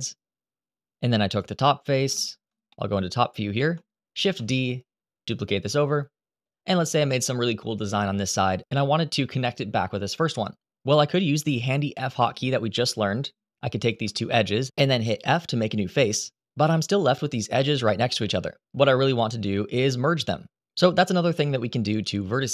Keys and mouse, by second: 0.3 Delete, 1.8 KP_7, 2.4 shift+middle click, 3.9 shift+d, 6.4 click, 11.9 2, 13.6 shift+click, 14.9 f.